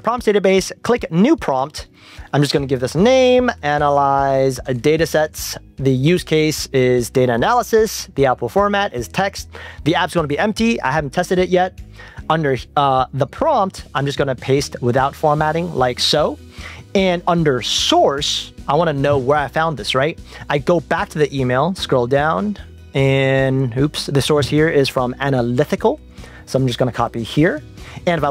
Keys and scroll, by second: 14.5 shift+super+v, 20.4 super+Tab, 25.8 super+c, 26.2 super+Tab, 28.0 super+Tab.